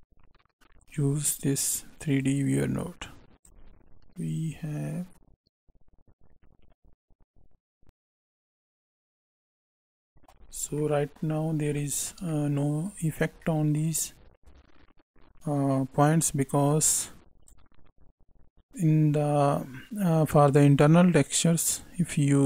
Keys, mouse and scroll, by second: 2.7 click, 3.7 middle click, 4.4 click, 9.6 middle click, 10.3 scroll up 2, 10.7 middle click, 11.4-11.7 scroll down 2, 11.7 shift+middle click, 12.2 middle click, 13.0 scroll up 1, 13.3 middle click, 16.6 click, 21.6 click.